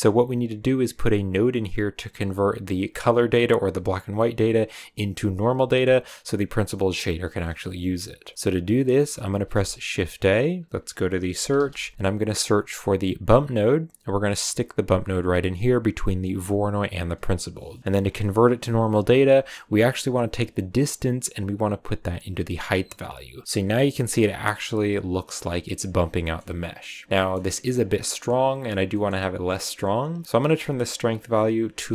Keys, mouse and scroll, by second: 0.3 click, 1.2 click, 2.9 click, 5.4 scroll down 2, 5.6-6.4 middle drag, 6.4 scroll down 3, 6.7 middle click, 7.2-8.3 scroll up 4, 8.3-9.3 middle drag, 9.3 shift+a, 16.9 click, 21.3 click, 23.4-23.9 scroll down 2, 25.9 scroll up 2, 26.2-26.6 middle drag, 26.6 click, 28.9-30.3 middle drag, 30.3-31.9 drag.